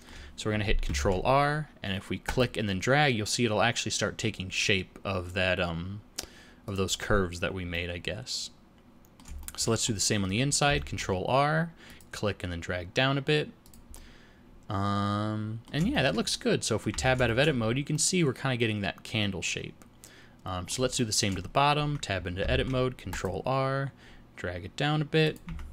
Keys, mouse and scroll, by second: 1.0 ctrl+r, 7.7 middle click, 9.4 shift+middle click, 9.8 scroll up 2, 10.9 ctrl+r, 13.9 middle click, 15.9 shift+middle click, 16.3 middle click, 17.0 Tab, 17.2 shift+middle click, 17.6 scroll down 3, 17.9 middle click, 21.0 shift+middle click, 21.8 Tab, 22.5 ctrl+r, 25.5 Tab.